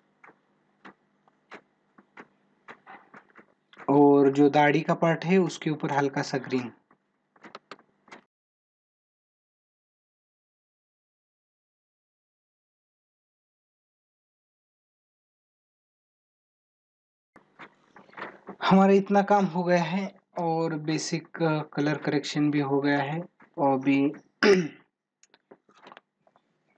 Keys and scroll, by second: 7.8 ctrl+alt+z, 10.4 ctrl+alt+z.